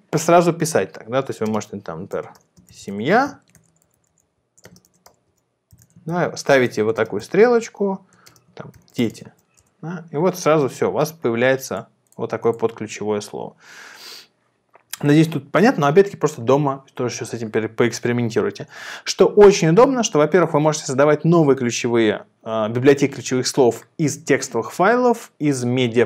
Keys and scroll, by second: 1.8-7.1 typing, 8.5-9.5 typing, 9.7 Return.